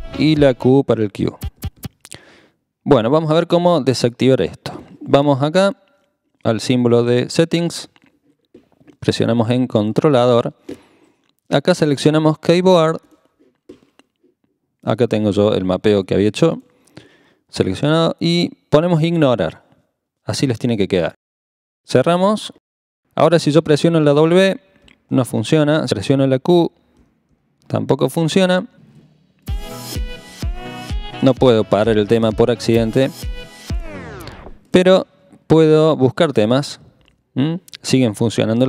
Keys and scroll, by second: 0.7 q, 1.6 q, 1.8 q, 24.5-25.1 typing, 26.3-27.3 typing, 30.3-30.8 typing, 36.6-37.6 typing.